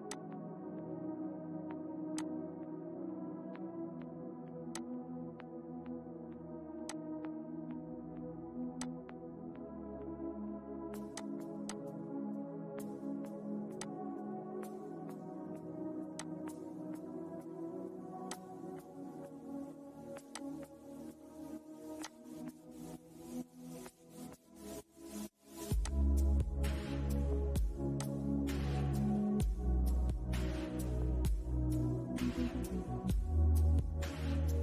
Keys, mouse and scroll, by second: 2.8-3.2 scroll up 1, 4.0 click, 10.4 click, 11.8 scroll down 1, 13.0 click, 15.4 click, 21.9 middle click, 22.9-23.4 scroll up 1, 25.1-31.9 drag, 33.8-34.6 scroll down 1.